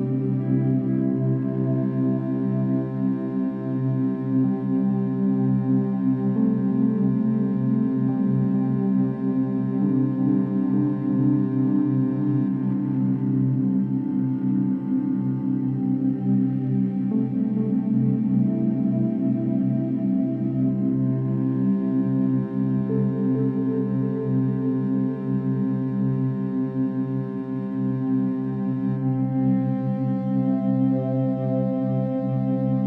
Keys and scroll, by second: 4.2 ctrl+s, 5.4 space, 11.6 ctrl+-, 12.0 ctrl+=, 12.0 ctrl+-, 12.2 ctrl+=, 12.7 space.